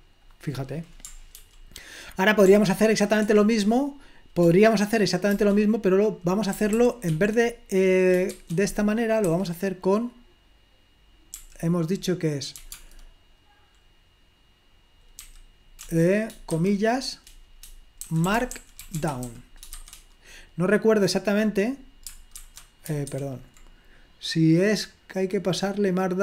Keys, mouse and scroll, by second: 0.0 click, 1.3 ctrl+p, 2.4 ctrl+p, 3.3 Return, 5.3-7.5 typing, 8.7 shift+4, 11.5 i, 15.5 ', 17.8-19.3 typing, 23.0 alt+3.